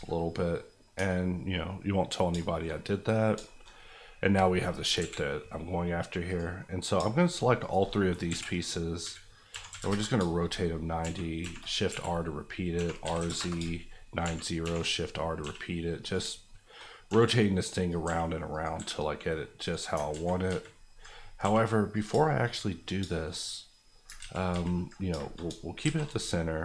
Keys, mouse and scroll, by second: 0.3 middle click, 0.9 Tab, 1.2 scroll down 1, 1.8-3.2 middle drag, 3.2 scroll down 2, 3.4 shift+middle click, 3.9-5.0 scroll down 1, 5.0 KP_1, 6.3 click, 6.6 middle click, 7.3 shift+click, 7.6 shift+click, 8.3 KP_1, 9.0 KP_3, 9.5 r, 9.7 KP_9, 9.8 KP_Enter, 11.0-15.4 typing, 13.3 KP_Enter, 15.2 scroll down 1, 16.0 click, 16.4 shift+middle click, 17.0 r, 17.8 click, 18.0 g, 18.5 click, 18.7 s, 19.6 right click, 20.1 ctrl+z, 21.4 g, 21.9 click, 22.2 shift+middle click, 22.5-23.0 scroll up 2, 23.0 shift+middle click, 24.2 ctrl+z, 25.1 shift+z, 25.8 shift+a.